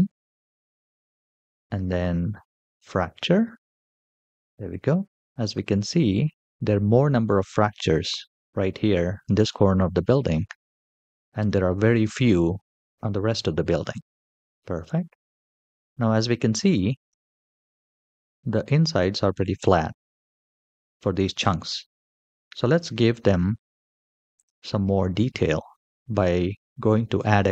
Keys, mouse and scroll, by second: 0.6-1.7 scroll down 2, 3.8 click, 5.2 shift+middle drag, 5.8-8.2 scroll up 2, 9.1 scroll down 1, 9.2-9.8 middle drag, 10.1 shift+middle drag, 10.5 middle click, 11.2-11.6 shift+middle drag, 11.9-15.0 middle drag, 12.9 scroll down 1, 14.4 scroll down 3, 15.7-16.8 scroll up 5, 16.8 click, 17.6 g, 21.8-22.6 scroll down 3, 22.7-23.0 shift+middle drag, 23.3 middle click, 24.1 click, 24.7 shift+middle click, 27.2 click.